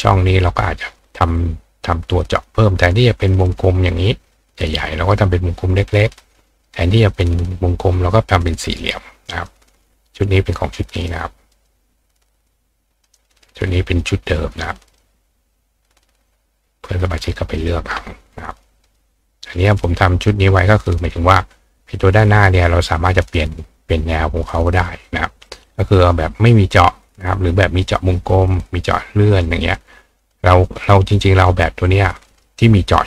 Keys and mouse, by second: 0.0 click, 0.5-0.9 drag, 1.4 click, 8.8-9.5 drag, 9.8-11.1 drag, 11.5 click, 12.5 click, 14.0 click, 16.0 click, 17.6 click, 18.8 click, 19.5 click, 25.0 click, 25.8 click, 29.6 click, 30.2 click, 31.1 click, 31.4 right click, 32.4-33.0 drag.